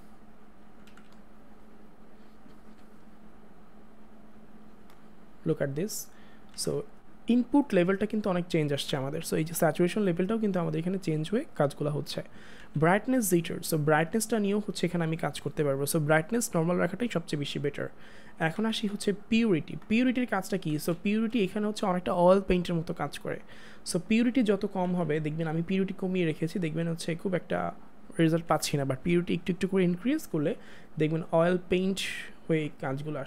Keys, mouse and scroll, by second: 0.9 ctrl+z, 4.2 click, 6.5 ctrl+z, 9.6 click, 12.4 click, 12.6 ctrl+z, 13.3 click, 15.2 ctrl+z, 16.1 click, 18.6 ctrl+z, 19.3 click, 23.4 click, 24.8 ctrl+z, 28.4 ctrl+z, 29.0 click, 31.2 click, 31.9 click.